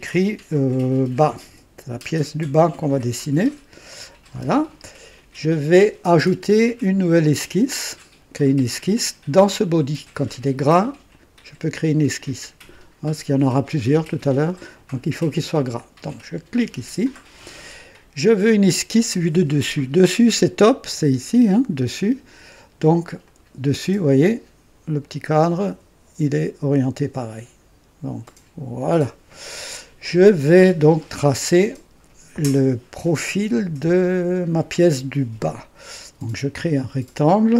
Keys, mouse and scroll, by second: 1.1 b, 1.4 a, 2.9 s, 4.3 Return, 16.5 click, 23.2 click, 28.2 click, 36.7 click.